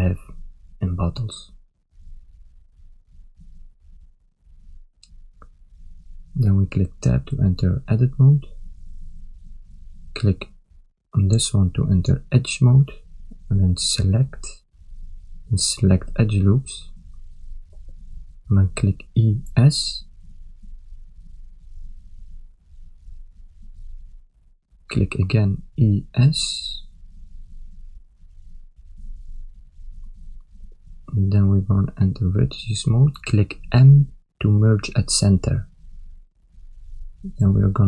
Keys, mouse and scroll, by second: 3.0 ctrl+KP_7, 4.4 shift+z, 5.2 shift+middle click, 6.0 ctrl+middle click, 7.0 Tab, 8.0 ctrl+middle click, 11.1 click, 12.6 click, 14.2 click, 18.7 ctrl+middle click, 19.9 e, 25.6 e, 32.7 click, 33.9 m, 37.3 click.